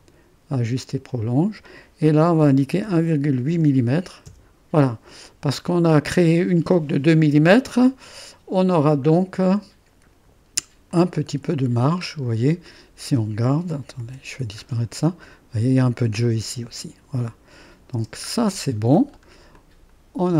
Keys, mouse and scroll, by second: 2.4 1, 2.8 ., 3.5 8, 4.2 Return, 9.1-10.9 scroll up 1, 10.9-12.1 drag, 11.4 space, 12.7 middle click, 12.9-13.9 drag, 13.6-14.5 typing, 15.2-16.4 drag, 17.9 space, 18.4-19.6 scroll down 1, 19.6-20.3 drag.